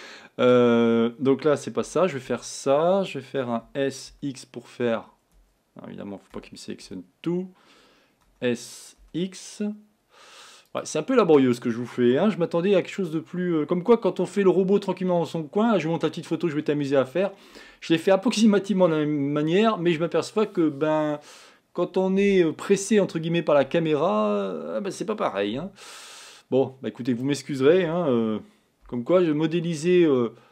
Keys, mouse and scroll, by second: 1.9 a, 2.3 a, 3.7 s, 6.4 a, 7.0 l, 8.5 s, 25.6 s.